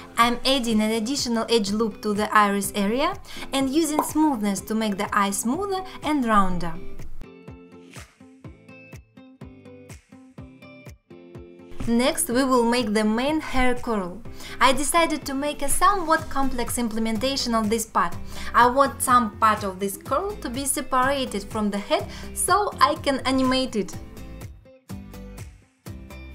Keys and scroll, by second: 1.3 ctrl+r, 8.4 alt+q, 9.3 Tab, 12.1 Tab, 12.5 2, 13.3 1, 13.8 shift+x, 14.1 ctrl+z, 14.2 shift+x, 15.4 shift+r, 18.0 ctrl+Tab, 23.9 alt+q, 24.2 alt+q.